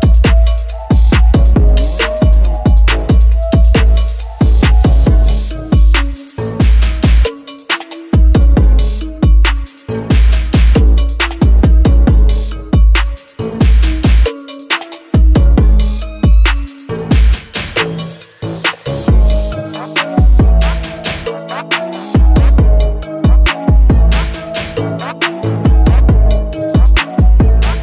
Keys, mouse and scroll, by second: 6.2 click, 10.3 click, 12.8 n.